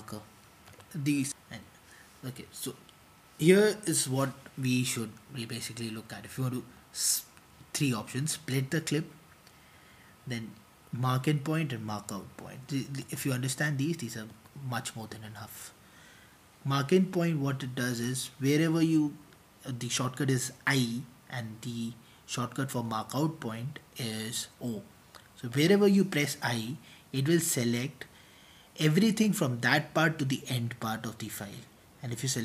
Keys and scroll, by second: 13.0 typing, 27.1-28.9 typing, 30.3-32.4 typing.